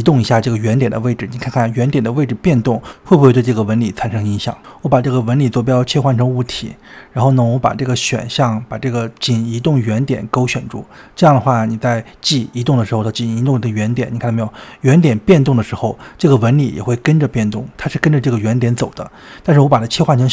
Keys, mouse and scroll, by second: 0.7-1.7 shift+middle drag, 1.7-2.3 scroll up 1, 2.3-5.1 middle drag, 5.9 middle click, 6.6 click, 7.2 middle click, 7.4 KP_7, 7.7-8.2 scroll up 2, 8.2 scroll down 2, 8.3-10.3 shift+middle drag, 10.6-12.5 drag, 12.5 g, 20.1 click.